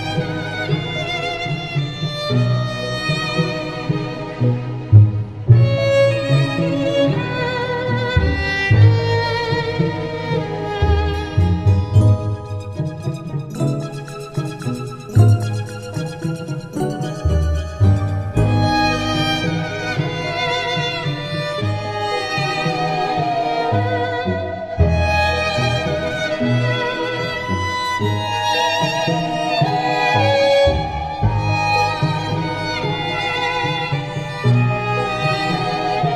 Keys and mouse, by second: 2.3 right click, 4.4 middle click, 6.0 right click, 7.3 middle click, 10.3 middle click, 12.3 middle click, 13.0 middle click, 14.8 middle click, 16.3 middle click, 18.8 middle click, 20.7 middle click, 22.7 middle click, 24.1 right click, 25.4 middle click, 27.0 middle click, 28.2 middle click, 30.1 right click, 32.2 middle click, 32.9 middle click, 34.3 right click.